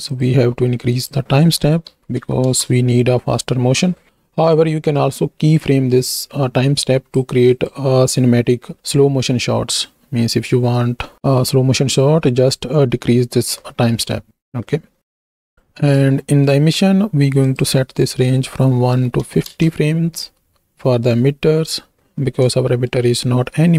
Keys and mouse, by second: 0.1 click, 0.9-2.6 drag, 4.7-7.8 drag, 16.3 middle click, 17.5-21.4 drag, 22.7 shift+middle click.